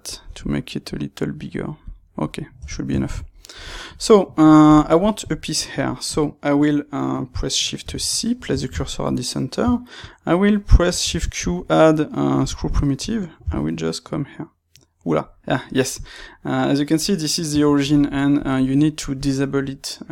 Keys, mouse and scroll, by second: 0.1 shift+click, 1.7 click, 1.9-7.7 middle drag, 2.5 Tab, 7.7 shift+c, 8.5 ctrl+middle click, 10.8 shift+q, 13.3 g, 17.5 Escape, 18.3-20.1 drag.